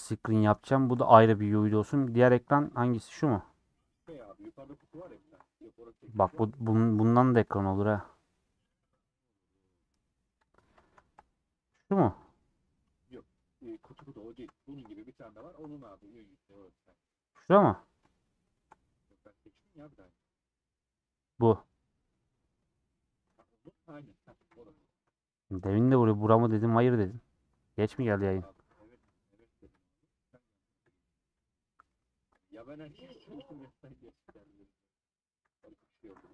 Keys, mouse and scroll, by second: 1.4-1.9 scroll up 2, 1.9 shift+middle click, 2.4 scroll up 1, 2.6 click, 2.9 scroll down 2, 3.1-3.7 scroll up 6, 3.2 middle click, 4.0 Tab, 4.8 click, 5.2 shift+click, 5.4-7.0 middle drag, 7.0 p, 7.2 Tab, 7.4 click, 9.5 click, 9.8 scroll down 2, 9.9 scroll up 1, 10.1-10.6 scroll down 2, 10.3 click, 10.6-12.2 middle drag, 12.2 click, 12.5 middle click, 13.2 click, 13.3 scroll up 3, 13.7 Tab, 13.8 3, 14.2 middle click, 15.1 scroll up 3, 15.4-17.5 shift+middle drag, 17.5 click, 18.3 shift+middle click, 18.7 scroll down 1, 18.8-21.5 middle drag, 21.5 click, 23.7 c, 24.4 c, 24.8 scroll up 3, 25.1 shift+middle click, 25.8 c, 28.8 p, 29.0 Tab, 29.4 click, 29.8 click, 31.6 scroll down 4, 31.8 middle click, 32.3 click, 32.5 scroll down 1, 32.7-34.1 middle drag, 34.1 scroll down 3, 34.3 middle click, 35.2 scroll down 2, 35.5 a.